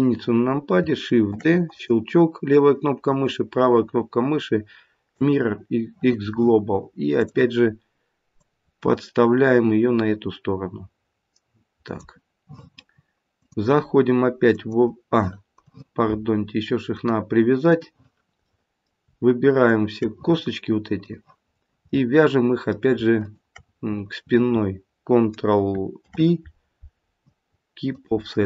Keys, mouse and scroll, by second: 1.2 shift+d, 3.0 right click, 7.1 click, 8.3 click, 13.3 click, 16.8 click, 18.4 middle click, 19.7 shift+click, 21.0 click, 21.5-22.1 scroll up 3, 21.9 middle click, 23.1 shift+click, 25.9 ctrl+p.